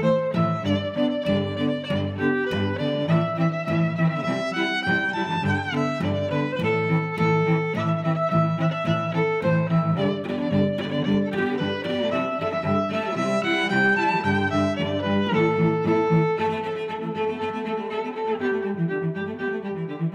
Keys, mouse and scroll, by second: 0.0 click, 0.3 middle click, 1.1 click, 1.6 0, 1.8 Return, 3.3 click, 4.7 click, 5.8 click, 8.1 middle click, 10.4 click, 12.8 middle click, 14.0 click, 14.8 click, 16.7 click.